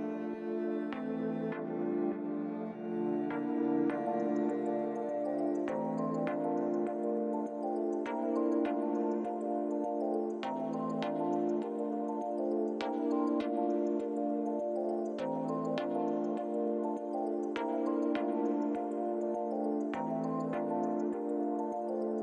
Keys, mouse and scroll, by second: 2.5 click, 3.6 Tab, 4.1-4.9 scroll down 4, 4.6 middle click, 6.0-6.3 scroll down 2, 6.4 middle click, 7.5 click, 8.8 click, 10.2 click, 10.8 click, 11.6 click.